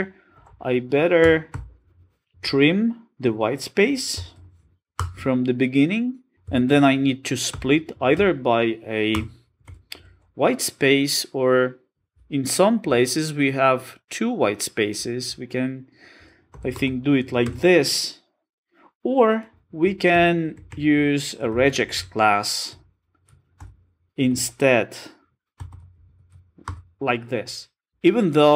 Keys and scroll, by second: 1.2 Return, 6.3 super+z, 9.1 Return, 11.8 Return, 20.1 alt+shift+Left.